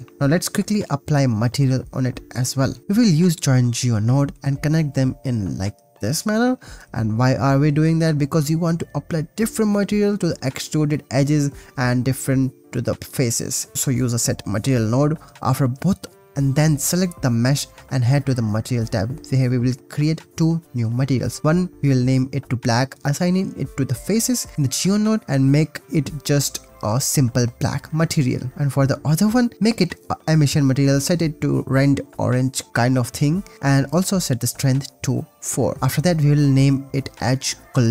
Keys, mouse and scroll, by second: 0.1 click, 0.4 shift+a, 3.6 click, 4.0 click, 4.9 click, 5.8 drag, 6.1 g, 6.4 click, 6.5 click, 6.7 shift+a, 6.8 click, 8.5 click, 9.1 shift+d, 10.2 click, 11.5 ctrl+s, 12.2 click, 12.6 click, 14.1 click, 18.5 click, 19.7 click, 20.7 click, 21.6 click, 21.7-23.3 drag, 24.1 click, 24.4 click, 25.9 click, 28.6 click, 29.6 click, 30.3-32.6 drag, 33.7-34.8 drag, 35.5 click.